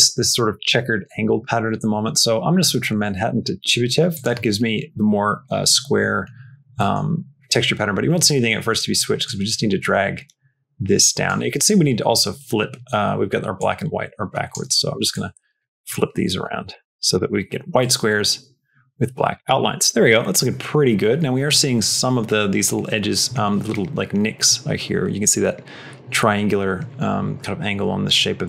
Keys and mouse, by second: 2.9-4.1 drag, 6.6 middle click, 8.3 middle click, 9.1-11.1 drag, 13.4 click, 15.0 click, 15.7 click, 16.6 click, 17.7-19.2 drag.